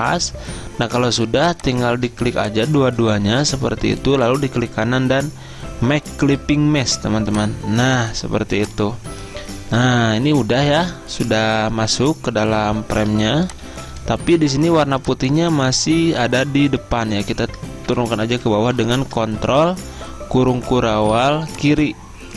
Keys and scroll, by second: 3.5 ctrl+z, 9.2 Escape, 13.2 z, 14.4 v, 16.0 ctrl+z, 18.0 ctrl+[, 18.2 ctrl+[, 18.4 ctrl+[, 18.5 ctrl+[, 21.3 z.